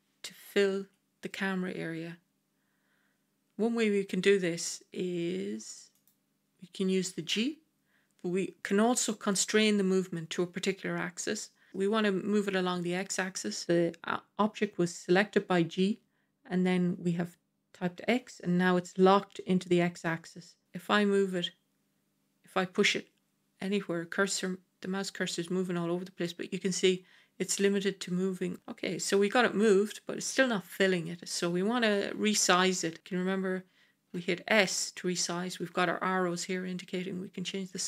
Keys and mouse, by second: 0.7 KP_0, 5.9 click, 7.2 g, 34.0 s.